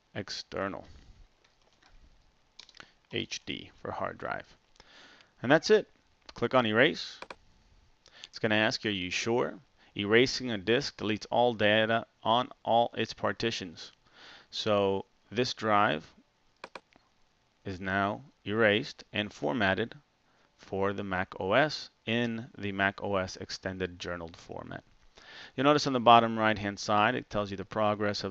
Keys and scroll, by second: 1.6 typing, 3.1-3.6 typing.